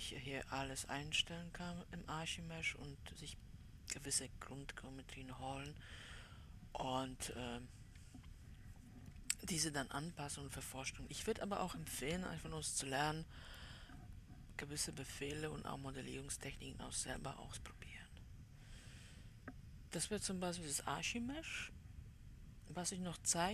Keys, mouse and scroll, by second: 1.7-2.5 scroll up 1, 2.5-3.7 middle drag, 4.9-6.2 scroll up 2, 6.2-9.9 middle drag, 9.9 Escape, 15.4-23.5 middle drag.